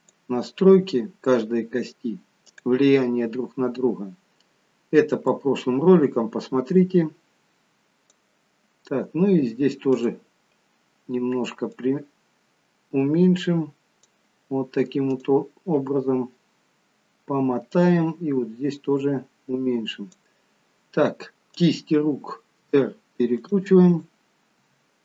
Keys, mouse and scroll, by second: 2.4 click, 3.8-5.2 scroll down 11, 5.2 click, 9.9 click, 11.6 click, 15.1 click, 16.6-17.8 scroll down 10, 17.8 click, 21.4 click, 22.5 r, 23.9 click, 24.7 r.